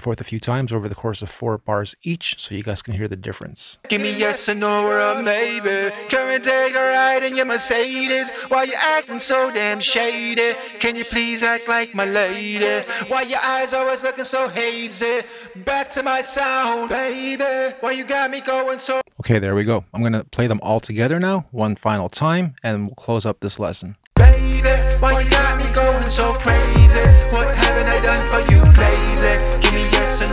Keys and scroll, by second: 19.0 space, 23.8 space.